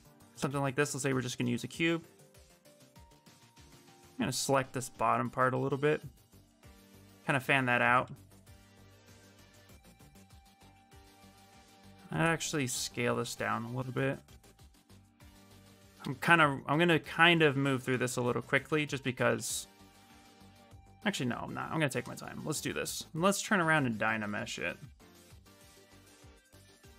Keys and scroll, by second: 0.1 w, 2.6 q, 5.9 ctrl+space, 7.8 w, 8.3 space, 9.2 space, 15.4 q, 18.8 shift+f, 19.1 shift+f.